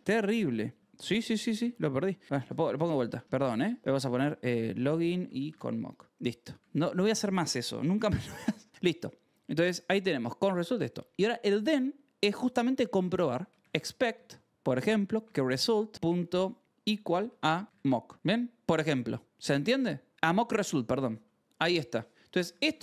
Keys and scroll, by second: 0.8 ctrl+r, 0.9 a, 1.2 Tab, 2.1-6.5 typing, 8.7 j, 9.1 o, 14.3-22.8 typing, 21.4 ctrl+s.